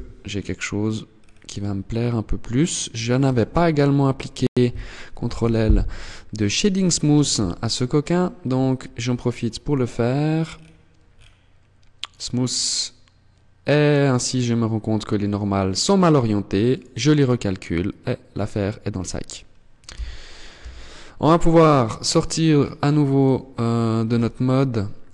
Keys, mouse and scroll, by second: 0.4-0.7 scroll down 3, 0.9-2.1 scroll up 4, 2.1 scroll up 1, 2.5 Tab, 4.5 ctrl+l, 6.5 t, 7.3-8.4 scroll up 9, 9.6-10.0 scroll down 6, 10.4 scroll down 4, 11.3 click, 13.4 middle click, 15.9 click, 19.1 z, 19.7 z, 20.6-21.3 scroll down 2, 21.7 click, 23.3 Tab, 23.9 middle click, 24.3-25.0 scroll down 7.